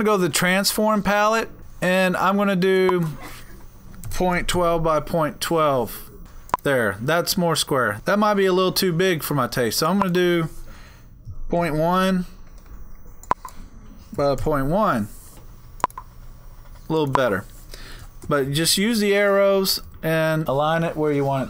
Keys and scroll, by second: 3.9-5.1 typing, 13.5-15.0 typing, 18.3 Left, 18.9 Left, 19.1 Up, 19.8 Left, 20.4 Down.